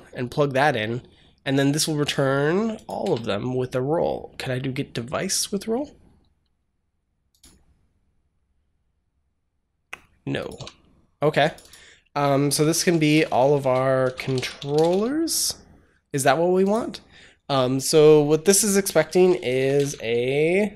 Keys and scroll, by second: 2.9 BackSpace, 10.4 s, 12.0-15.2 typing, 19.4 BackSpace.